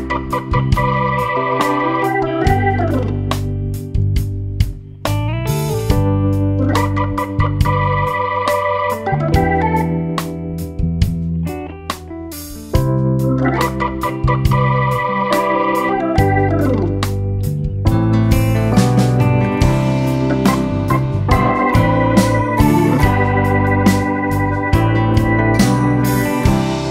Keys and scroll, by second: 9.9 Home.